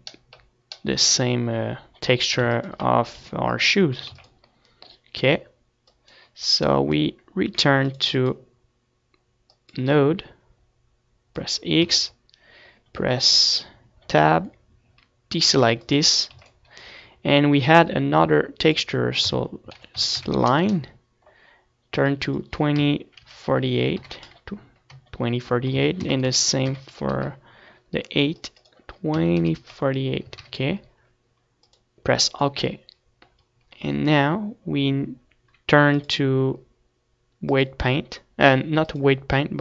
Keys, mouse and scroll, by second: 0.9-3.3 middle drag, 3.3 ctrl+s, 4.0 KP_1, 4.6 z, 4.8 ctrl+s, 7.3-14.3 drag, 12.7 Tab, 16.5-22.6 drag, 35.5 middle click, 36.2-38.1 drag, 39.1-39.6 drag.